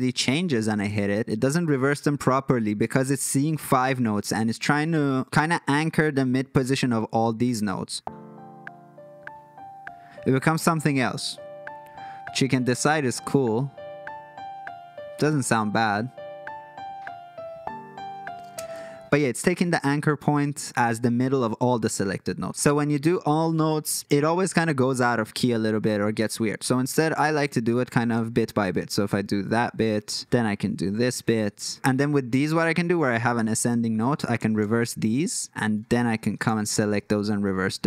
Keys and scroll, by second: 0.8 alt+super+l, 18.6 space, 28.0 alt+super+l, 31.0 alt+super+l, 34.4 alt+super+l, 36.5 alt+super+l.